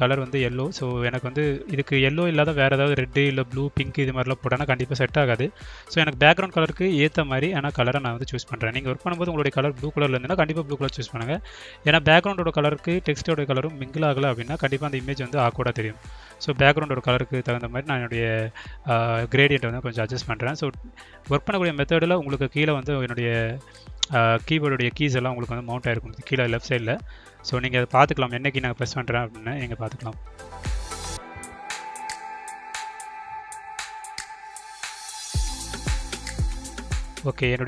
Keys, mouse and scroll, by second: 0.4 click, 1.1 click, 2.6 click, 3.7 click, 4.5 click, 5.3 click, 5.9 click, 6.9 click, 7.6 click, 10.7 click, 12.1 drag, 13.3 click, 16.1-20.4 drag, 21.9 click, 23.8 click, 24.9 click, 25.6 click, 26.5 click, 27.9 click, 29.3 click, 33.6 ctrl+drag, 34.7 click, 35.3 click, 36.1-37.1 drag, 37.3-37.6 drag.